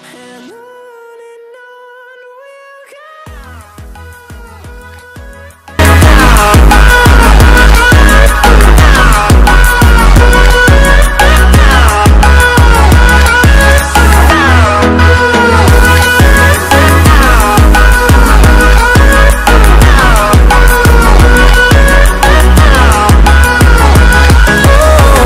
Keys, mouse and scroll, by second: 1.1 ctrl+0.